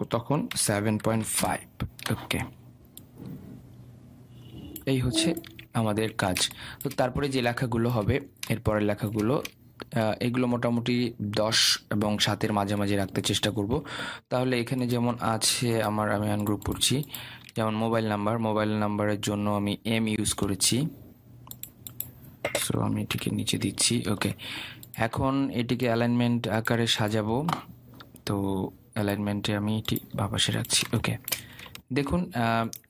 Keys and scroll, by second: 1.9 Return.